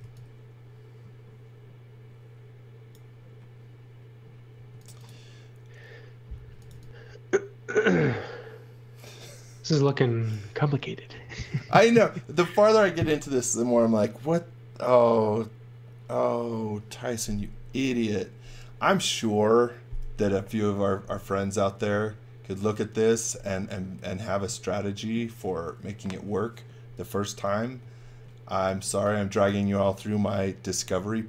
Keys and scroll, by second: 0.0-0.5 typing, 4.5 space, 6.2-7.2 typing, 28.5 x, 28.8 v.